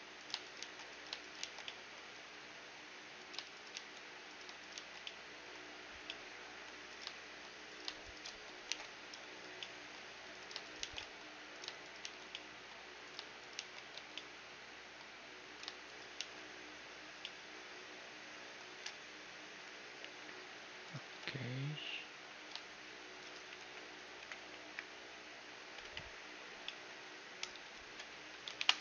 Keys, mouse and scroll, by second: 0.7 shift+r, 1.5 shift+r, 1.7-3.7 middle drag, 3.2-6.9 right drag, 3.8 shift+r, 4.8 shift+r, 5.1-7.9 middle drag, 6.9-10.0 right drag, 8.7 alt+m, 9.7 middle click, 10.4-15.4 right drag, 10.9 shift+r, 12.1 shift+r, 13.6 shift+r, 14.0 a, 15.4 middle click, 15.6 click, 16.2-17.4 right drag, 16.2 shift+r, 17.4 click, 17.4 middle click, 17.9-19.3 middle drag, 19.3-20.9 scroll up 1, 20.9-22.7 right drag, 21.1 g, 23.6 KP_1, 24.2 KP_4, 24.5 KP_4, 24.7 KP_4, 25.9 KP_1, 26.7-28.6 middle drag, 27.0 z, 27.5 z, 27.9 KP_3, 28.2 z, 28.6 ctrl+KP_3.